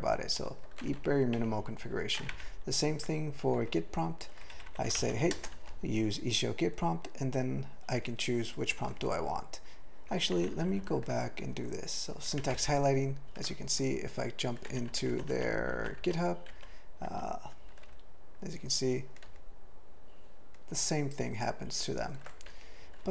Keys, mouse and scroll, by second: 0.8 ctrl+/, 2.3 ctrl+n, 3.6 Tab, 4.5 ctrl+n, 4.7 ctrl+n, 5.0 alt+m, 5.3 ctrl+space, 5.5 ctrl+alt+f, 7.9 ctrl+g, 9.1-10.1 ctrl+p, 10.4 ctrl+n, 10.5 ctrl+n, 10.7 ctrl+n, 12.6 ctrl+o, 14.7 ctrl+v, 14.9 ctrl+v, 15.3 ctrl+v, 16.0 ctrl+v, 17.1 ctrl+v, 17.9-18.5 ctrl+n, 19.2 ctrl+p, 20.6 ctrl+p, 22.5 q.